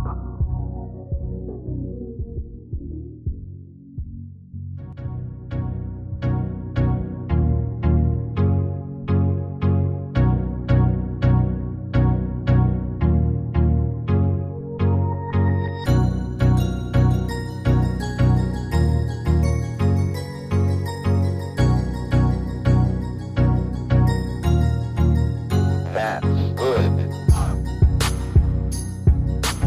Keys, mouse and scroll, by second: 6.3 ctrl+d, 9.6 ctrl+d.